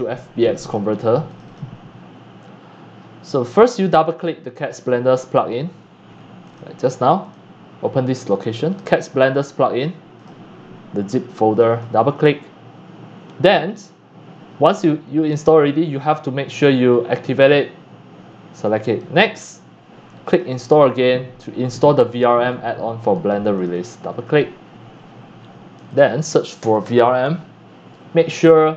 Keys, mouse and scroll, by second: 0.6 click, 1.2 click, 1.4 click, 3.2-3.6 drag, 6.4 click, 6.6 click, 7.2 click, 7.7-8.2 drag, 8.6 click, 9.9 scroll down 1, 10.1 click, 11.5 click, 11.6 click, 16.0 click, 16.5 click, 20.2 click, 23.5 click, 23.7 click, 25.9 click, 26.5-27.5 typing, 26.6 click.